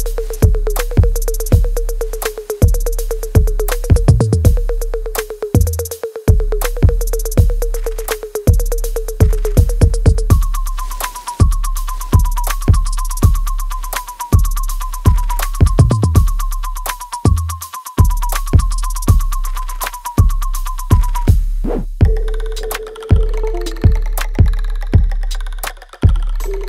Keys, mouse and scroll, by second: 1.0 click, 2.7 alt+click, 3.3 right click, 4.3 click, 8.4-11.0 alt+drag, 11.0 alt+middle click, 11.3 alt+right click, 11.7 alt+click, 12.3 alt+middle click, 13.5 click, 14.2-16.5 alt+right drag, 16.5-19.3 ctrl+drag, 21.7 alt+right click, 24.3-26.6 drag.